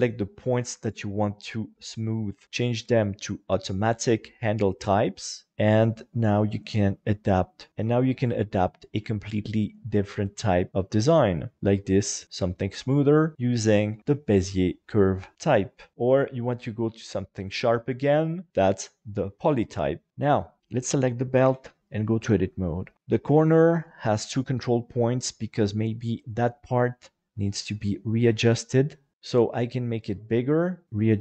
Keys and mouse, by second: 0.6 Escape, 2.3 v, 4.6 right click, 5.5 g, 7.1 click, 7.7 alt+shift+a, 8.3 g, 9.2 click, 9.7 right click, 10.1 shift+right click, 10.7 g, 11.3 click, 11.6 alt+z, 11.6-13.3 middle drag, 13.7 shift+middle click, 14.0 middle click, 15.9-18.7 drag, 19.6 middle click, 20.3 Tab, 21.4 KP_7, 22.9 Tab, 23.2 shift+middle click, 25.2 right click, 26.1 shift+right click, 27.2 s, 29.6 s, 30.8 click, 30.8 g.